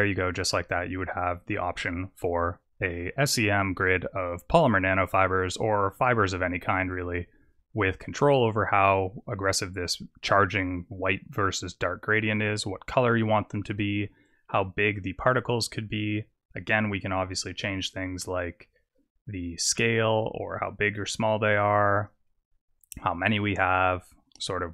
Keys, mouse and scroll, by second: 8.1-11.5 scroll up 4, 13.7 click, 15.3 click, 15.3-16.6 scroll down 3, 15.8 click, 16.6-17.9 scroll down 1, 17.9-18.5 scroll down 2, 18.8 click, 20.0 click, 20.7 click, 23.0 click.